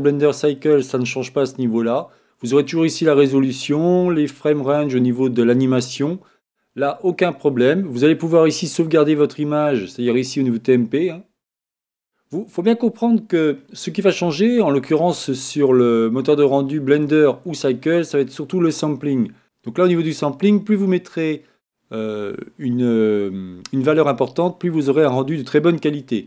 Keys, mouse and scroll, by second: 10.1-12.1 drag.